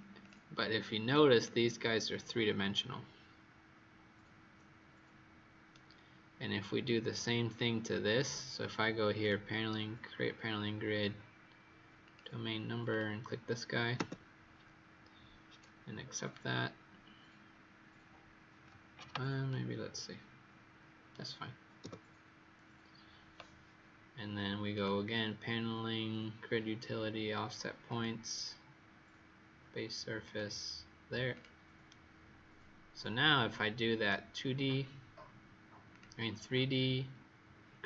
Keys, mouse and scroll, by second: 1.3 right click, 6.4-7.5 scroll down 3, 7.5 right click, 9.1 click, 13.9 Return, 19.4 right click, 21.7 Return, 24.7 click, 31.8 right click, 34.6-35.6 scroll up 2, 35.8 click.